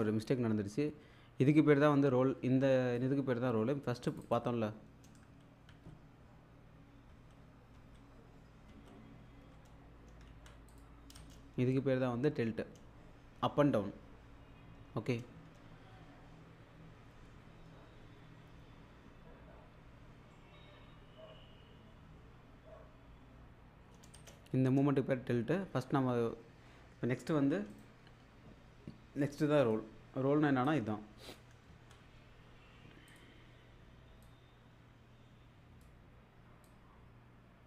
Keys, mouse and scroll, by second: 4.1 click, 5.3 ctrl+z, 7.1 ctrl+z, 8.7 ctrl+z, 10.2 ctrl+z, 10.7 click, 11.2 space, 24.2 space, 27.7 right click, 29.6 click, 31.7 ctrl+z.